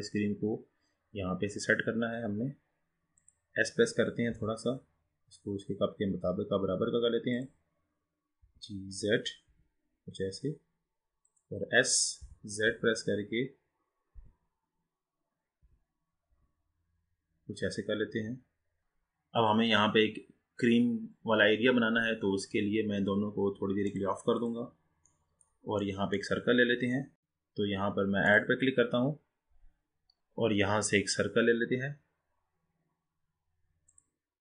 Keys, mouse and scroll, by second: 4.5 s, 8.5 g, 12.2 e, 12.8 z, 15.6 s, 20.1-21.2 scroll down 2, 23.9 drag, 24.5 click, 25.2-27.1 middle drag, 28.4-31.5 drag.